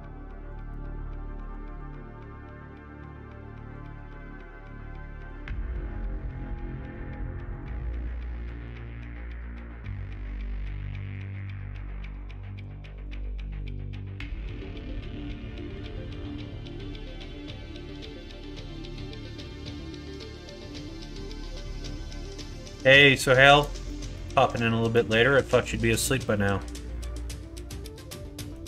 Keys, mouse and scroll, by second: 0.5 click, 1.3 s, 4.5 click, 5.3 middle click, 5.4 ctrl+z, 7.5 alt+shift+click, 7.7 middle click, 8.3 s, 13.0 alt+click, 13.5 s, 15.5 click, 16.1 Tab, 16.4 click, 18.1 middle click, 18.9 middle click, 20.9 middle click, 21.3 middle click, 22.5 shift+middle click, 23.9 shift+middle click, 24.6 middle click, 25.1 shift+middle click, 25.7 middle click, 27.3-28.5 middle drag.